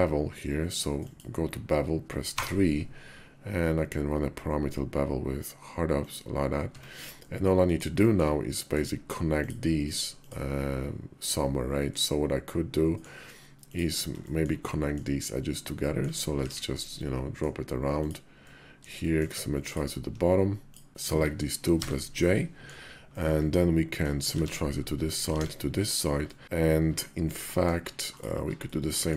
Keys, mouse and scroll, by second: 6.4 Tab, 7.0 click, 7.8 shift+click, 8.4 click, 11.6-12.8 drag, 14.1 shift+click, 14.4 click, 15.6 click, 16.2 alt+x, 16.8 click, 18.2 click, 18.8 shift+click, 19.4 ctrl+click, 21.5 j, 22.0 click, 22.9 click, 24.1 alt+x, 24.6 click, 25.2 alt+x, 26.0 click, 27.1 click, 28.5 click.